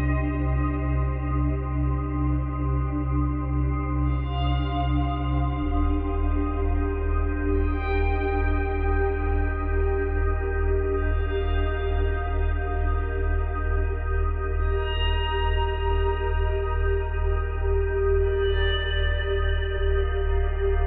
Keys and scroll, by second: 3.1 space, 7.0 space, 8.0 space, 10.4 space.